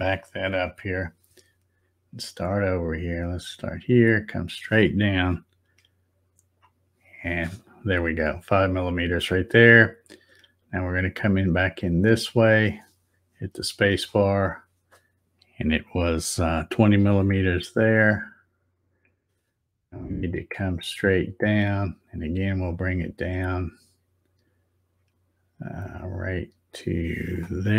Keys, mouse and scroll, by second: 3.4-6.5 drag, 10.6-14.1 drag, 13.9 space, 20.7-27.7 drag.